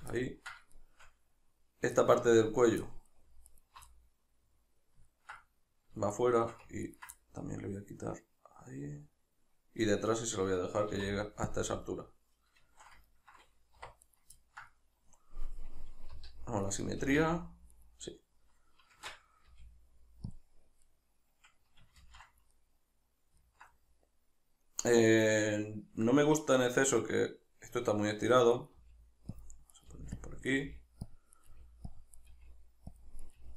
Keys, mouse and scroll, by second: 0.2-3.5 ctrl+middle drag, 3.5 alt+right click, 3.9-6.1 middle drag, 6.1 shift+right click, 6.8 ctrl+right click, 7.2-14.1 middle drag, 10.9 x, 13.8 1, 14.1 right click, 14.4-16.7 ctrl+middle drag, 16.1 g, 16.7 right click, 17.1 g, 17.9 right click, 18.9 shift+Tab, 20.4 click, 20.9-25.1 middle drag, 22.0 ctrl+z, 25.1 right click, 28.5 right click, 28.8 g, 29.5 click, 29.7 right click, 29.9 g, 30.3 click, 30.5 right click, 30.7 g, 31.1 click, 31.4 right click, 31.5 g, 32.0 click, 32.2 right click, 32.3 g, 33.0 click, 33.2 right click, 33.4 g.